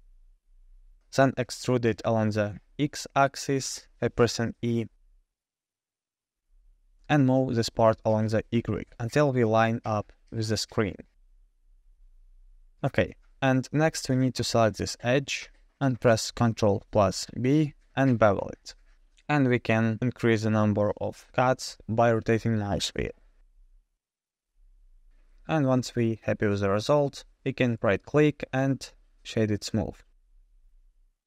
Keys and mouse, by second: 0.6 g, 2.8 e, 8.0 3, 9.4 g, 13.3 2, 14.3 click, 16.0 ctrl+b, 25.9 shift+Tab, 26.1 shift+middle drag, 26.7-29.6 drag, 29.8 Tab.